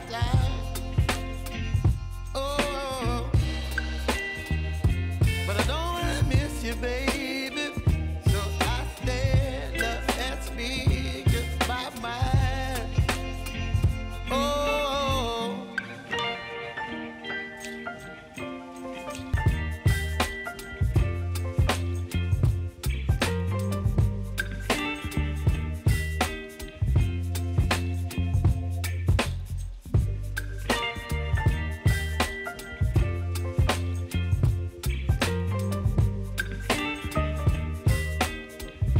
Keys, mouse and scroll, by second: 3.2-25.7 drag, 25.7 ctrl+c, 25.9 ctrl+v, 27.7-29.3 drag, 29.3 F9, 30.1 click, 30.9 alt+click, 31.6-32.8 typing, 32.9 Down, 33.3 Return, 34.1 ctrl+a, 34.6 ctrl+c, 35.1 alt+click, 35.7 ctrl+v, 36.0 alt+click, 36.6 ctrl+v, 37.0 alt+click, 37.6 ctrl+v, 37.9 click.